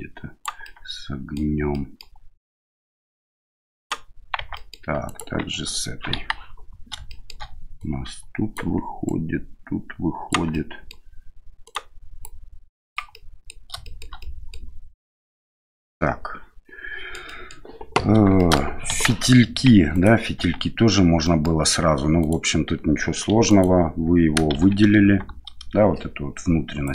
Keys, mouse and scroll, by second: 0.6 middle click, 1.7 middle click, 2.4 middle click, 3.0 right click, 4.4 Tab, 4.5 middle click, 5.0 right click, 5.4 Tab, 6.1 KP_1, 7.1 shift+middle click, 7.8 right click, 9.0-10.3 right drag, 10.6 middle click, 11.6 right click, 12.2 click, 13.2 middle click, 13.9 shift+middle click, 14.3 middle click, 15.2 Tab, 15.9-17.1 middle drag, 17.2 middle drag, 18.4 shift+middle drag, 18.9 KP_1, 19.9 right click, 20.4 Tab, 21.2 middle click, 22.2 right click, 23.3 3, 23.5 right click, 24.5 shift+z, 26.8 click.